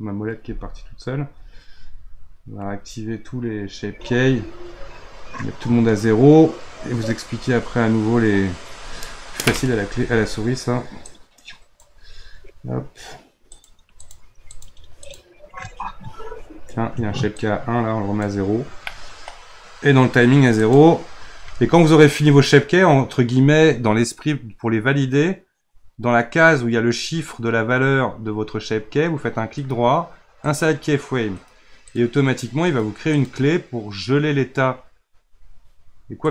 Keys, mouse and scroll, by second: 2.8 click, 3.8 click, 4.3-8.7 drag, 11.0-12.1 drag, 12.1-13.5 scroll up 3, 13.5 click, 14.0 click, 14.5 click, 15.0 click, 15.7-17.3 scroll up 1, 17.3-18.9 drag, 18.9-20.5 middle drag, 20.5-22.3 drag, 22.3-24.3 scroll down 5, 24.3-25.8 scroll down 1, 29.5-36.3 right drag.